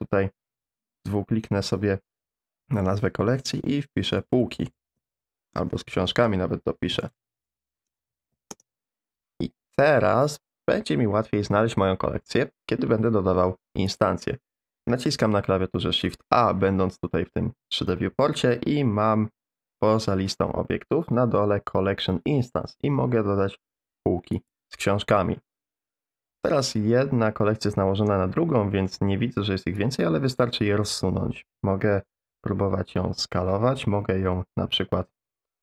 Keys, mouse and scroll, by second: 5.7 middle click, 18.1 shift+a, 29.8-30.9 drag, 32.1 s, 34.2 r.